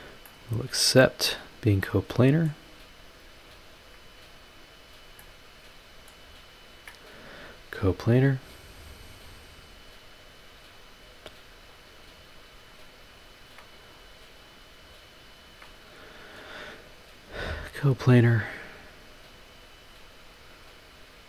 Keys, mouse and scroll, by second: 0.2-1.4 middle drag, 1.5 scroll down 1, 1.8-2.7 middle drag, 2.7-3.1 scroll up 1, 3.7 ctrl+click, 4.3 ctrl+click, 4.8 scroll down 1, 5.2-6.3 middle drag, 6.7 ctrl+click, 7.8 click, 9.2 click, 10.7 scroll up 1, 11.7 click, 12.7 ctrl+click, 13.2 ctrl+click, 13.8 ctrl+click, 14.3 ctrl+click, 15.4 ctrl+click, 16.8 click, 17.9 click, 18.2 scroll down 2, 18.9-19.4 scroll up 4, 20.0 click, 20.6 scroll down 2, 21.1-21.2 scroll up 2.